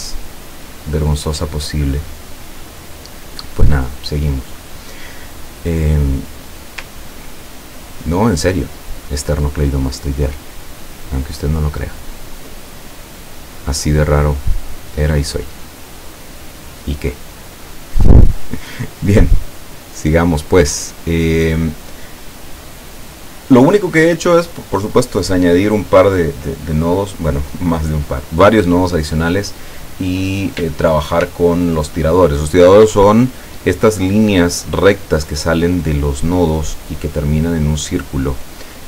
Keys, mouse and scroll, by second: 7.5 ctrl+scroll up 2, 8.3 ctrl+scroll down 2, 8.6-9.2 ctrl+scroll up 4, 12.5-16.2 drag, 18.7-21.2 drag.